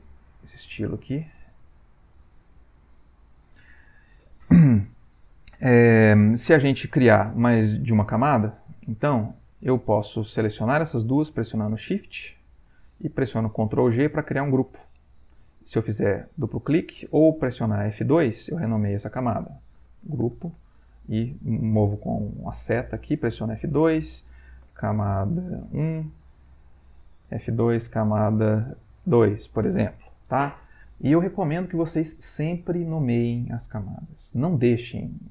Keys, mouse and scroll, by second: 1.2 click, 2.7 click, 9.3 Insert, 11.6 shift+click, 12.4 shift+click, 13.6 ctrl+g, 14.5 ctrl+click, 16.3 click, 17.5 Escape, 18.0 F2, 19.4-20.7 typing, 21.1 Down, 23.1 F2, 24.4-26.2 typing, 26.5 Down, 27.3 F2, 27.5-29.1 typing, 29.9 Return.